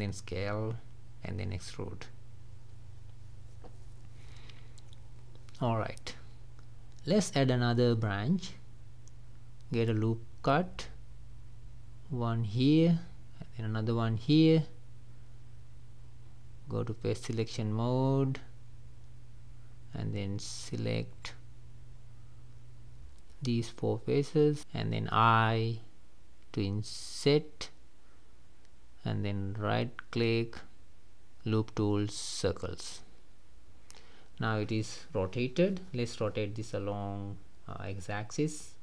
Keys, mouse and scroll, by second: 0.6 click, 0.9 middle click, 1.7-2.1 scroll up 2, 2.2 middle click, 2.8-3.4 scroll down 2, 3.5-5.1 middle drag, 5.1 shift+scroll down 1, 5.3 middle click, 5.8-6.1 scroll up 2, 6.1-9.2 middle drag, 9.7-15.7 drag, 15.7-16.2 scroll up 3, 16.7 click, 17.0 3, 18.2 click, 19.9 ctrl+z, 22.1 shift+click, 22.7 shift+click, 23.3 shift+click, 24.0-26.3 middle drag, 31.1-34.1 right drag, 34.1-37.8 middle drag, 37.8 r.